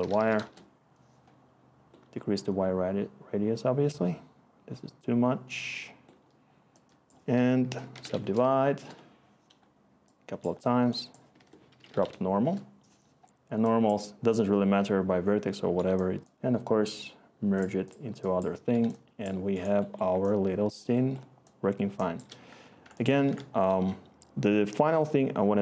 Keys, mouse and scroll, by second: 0.0-0.6 typing, 7.3 Tab, 7.5-8.7 typing, 8.7 Return, 11.3 Tab, 11.4-12.3 typing, 12.4 Return, 23.2 ctrl+s.